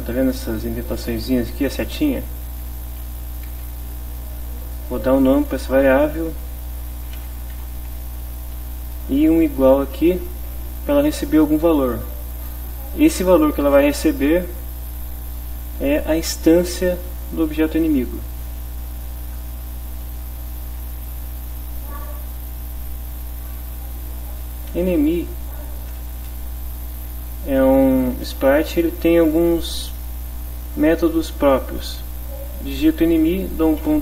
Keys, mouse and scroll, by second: 1.1 click, 2.3 click, 3.5 space, 7.1-7.9 typing, 9.2 space, 10.5 =, 11.7 Right, 14.9 shift+End, 17.3 Left, 19.2 Right, 20.8 Return, 24.5 e, 24.7 n, 24.9 e, 26.3 Return, 33.8 ..